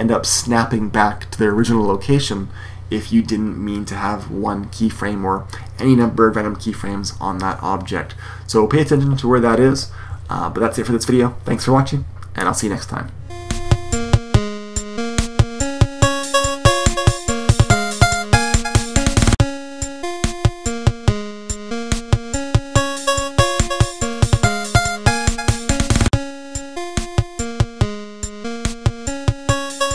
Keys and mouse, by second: 14.3-15.9 drag, 17.1 x, 17.5 shift+a, 18.7 click, 20.3 click, 23.6 click, 24.1 click, 24.9 click, 25.6-26.8 drag, 26.8 shift+a, 27.2 click, 28.4 click.